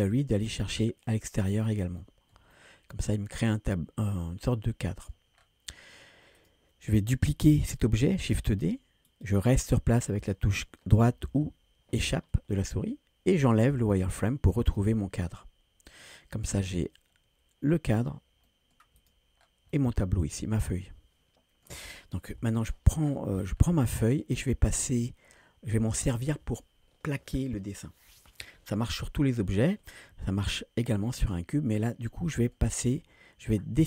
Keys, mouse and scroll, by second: 0.1 click, 1.4-1.9 scroll down 2, 2.0-2.3 shift+middle drag, 2.6-5.1 middle drag, 5.4 scroll down 2, 6.4 click, 8.4 shift+d, 14.5 click, 15.4-16.2 middle drag, 16.4 scroll up 2, 17.2-17.6 scroll up 1, 18.5 middle drag, 19.0 click, 19.4 scroll down 2, 19.7-21.7 middle drag, 22.3 KP_1, 23.0-23.5 scroll down 3, 23.6-24.0 shift+middle drag, 31.3-32.6 middle drag.